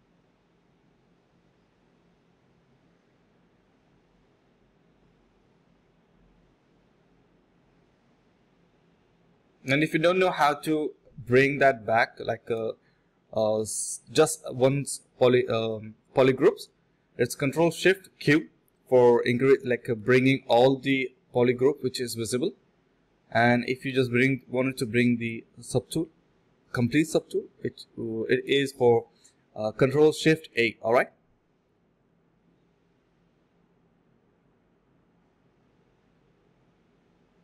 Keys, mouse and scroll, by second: 0.0-1.5 typing, 0.1 alt+click, 1.1 ctrl+b, 2.4 shift+click, 3.2-3.7 typing, 4.0 alt+click, 4.3 ctrl+shift+click, 4.7 ctrl+shift+q, 5.4-6.4 typing, 5.7 ctrl+shift+click, 6.0 ctrl+shift+q, 6.5 alt+click, 6.8 alt+click, 7.5 alt+click, 7.7 alt+click, 8.4 ctrl+b, 9.3 typing, 10.1 double click, 11.6 shift+click, 13.6 double click, 15.0 shift+click, 15.1 shift+double click, 15.2 shift+click, 16.3 ctrl+b, 16.6-17.6 typing, 19.9-21.3 typing, 22.8 typing, 24.1-25.5 typing, 25.2 alt+click, 26.3 alt+click, 26.8 typing, 28.3 alt+click, 28.6 alt+click, 28.8 alt+click, 29.6 alt+click, 30.3 ctrl+b, 30.7-31.4 typing, 31.7 double click, 33.5 alt+click, 33.8 alt+click, 34.1 alt+click, 35.0 ctrl+b, 35.5 typing, 36.0 double click, 36.9 shift+click.